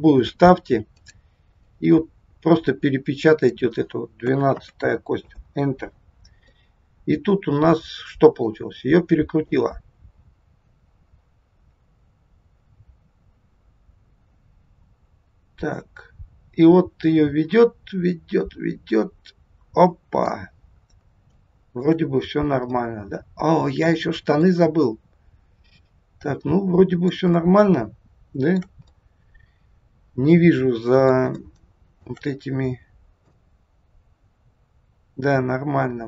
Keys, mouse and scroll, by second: 6.5 middle click, 9.4 click, 20.8 scroll down 2, 21.3 shift+middle click, 22.0-22.4 scroll up 2, 22.8 middle click, 27.3 shift+scroll up 1, 27.4 shift+middle click, 31.4 shift+middle click, 32.4-33.3 scroll up 4, 33.3 middle click.